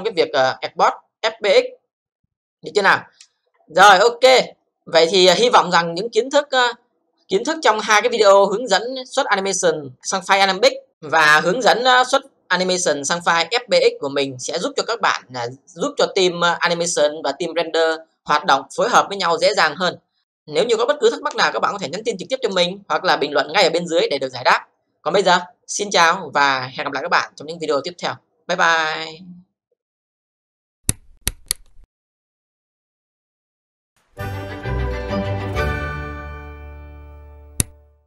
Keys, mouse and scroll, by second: 7.5 click.